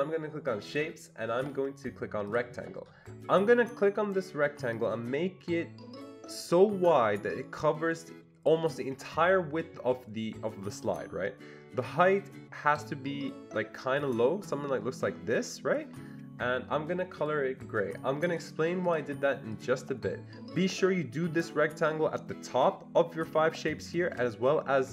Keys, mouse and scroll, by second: 0.7 click, 2.3 click, 4.8-10.9 drag, 11.8-18.3 drag, 18.3 click, 18.9 click, 19.5 click.